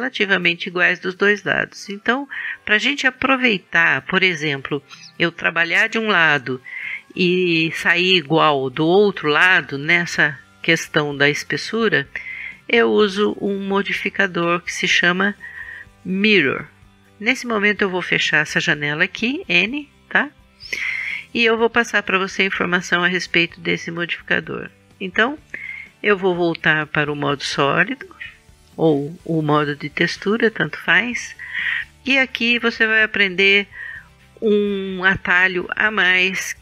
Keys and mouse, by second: 19.2 n, 26.6-27.8 drag.